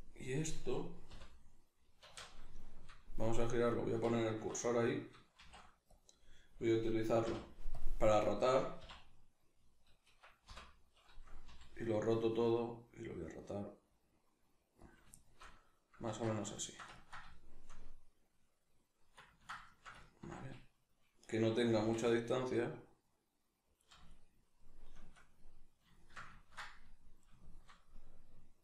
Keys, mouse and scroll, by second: 0.4 right click, 1.1 l, 2.1 alt+q, 2.1-3.7 middle drag, 3.7 right click, 4.4 1, 4.6 right click, 5.4 shift+s, 7.2 ., 8.2 right click, 8.8 `, 10.2 Escape, 14.9 click, 15.1-21.7 shift+middle drag, 16.1 alt+q, 21.7 g, 23.8 click, 24.1-28.6 shift+middle drag.